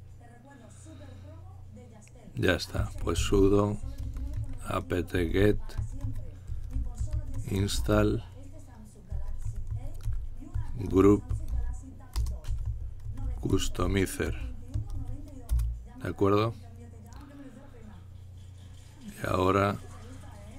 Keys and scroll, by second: 2.6-15.9 typing, 17.0 typing.